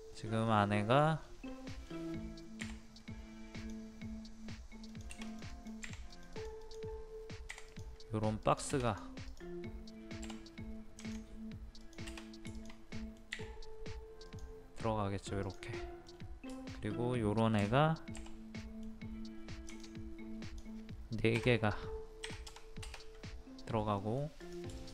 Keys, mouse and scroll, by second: 0.1-0.5 scroll up 1, 0.5 middle click, 1.1-1.5 scroll up 1, 1.7 middle click, 3.6-9.3 drag, 12.5 shift+click, 12.9-13.9 middle drag, 13.9 middle click, 14.2 click, 15.8 middle click, 17.9 space, 18.6 middle click, 19.7 click, 22.2 KP_3, 24.0 middle click, 24.4 click, 24.8 shift+click.